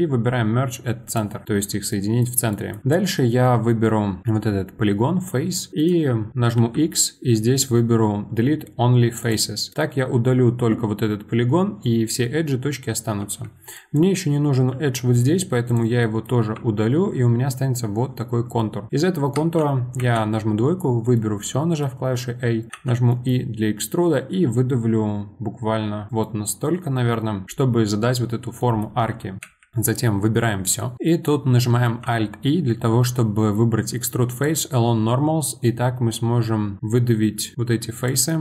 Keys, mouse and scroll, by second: 1.9-4.2 middle drag, 4.2 click, 5.7 right click, 6.6 x, 9.7-12.5 middle drag, 13.2 2, 13.7 click, 14.7 x, 16.0 middle click, 16.5 1, 18.6 middle click, 19.3 2, 20.0 a, 21.2-22.7 middle drag, 22.7 e, 26.2-29.4 middle drag, 29.4 a, 30.9 middle click, 31.8 alt+e, 38.3-38.4 middle drag.